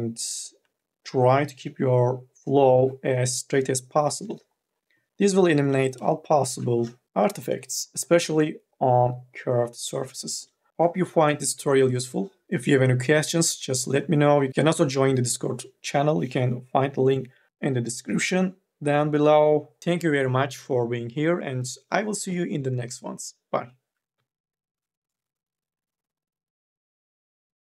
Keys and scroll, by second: 0.4 m, 0.8 o, 5.5 3, 5.8 e, 6.3 2, 10.7 r, 23.6 4, 24.0 q, 24.9 n, 25.3 a.